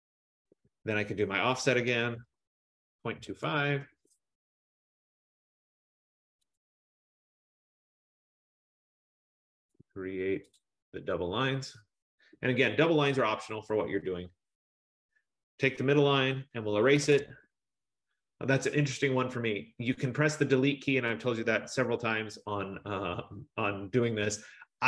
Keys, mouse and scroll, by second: 0.7 Return, 1.5-5.8 typing, 5.3-5.7 scroll, 6.7 click, 7.7-8.5 typing, 8.0 click, 10.7 click, 11.6 click, 12.5 Return, 12.9 middle click, 13.0 middle click, 14.8 click, 16.7-17.8 typing, 18.9 middle click, 23.7 scroll.